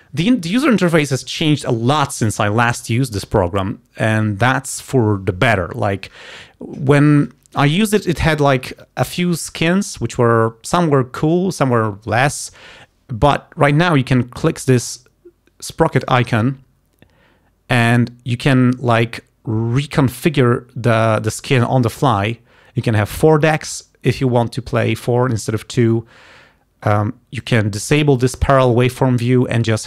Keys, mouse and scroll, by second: 16.1 click, 18.0 click, 26.0 click, 27.5 click.